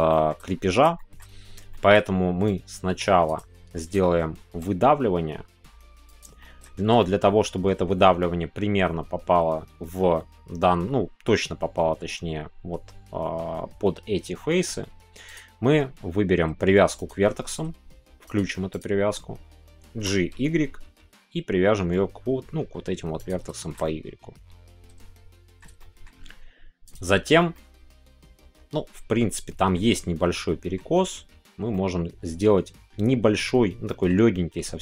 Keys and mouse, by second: 0.0 shift+middle click, 0.9 shift+middle click, 1.7 shift+middle click, 3.5 shift+middle click, 3.9-6.0 middle drag, 6.0 click, 6.4-7.6 shift+middle drag, 10.2 middle click, 15.3-23.3 drag, 23.5 shift+middle click, 23.8-25.6 middle drag, 25.8 shift+middle click, 26.8 click, 27.5-29.7 middle drag, 30.3 middle click, 30.6 click, 30.7 middle click, 31.7 middle click, 33.8 middle click.